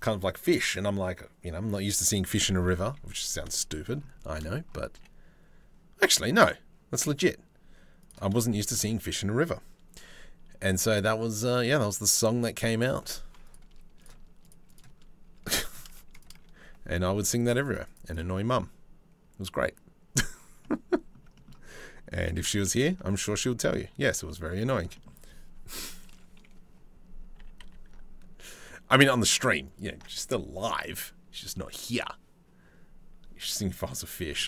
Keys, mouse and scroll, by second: 2.4 KP_3, 3.9 shift+middle click, 4.6 g, 8.1 shift+middle click, 10.5-11.7 drag, 13.1 click, 14.4 click, 15.3 click, 15.8 click, 16.9 click, 17.0 click, 17.2 click, 17.3 middle click, 17.5 middle click, 17.7 middle click, 20.2 middle click, 21.0 shift+middle click, 21.8 g, 23.9 middle click, 24.6 shift+middle click, 25.4 KP_3, 25.7 KP_1, 27.0 g, 33.1 middle click, 34.2 middle click.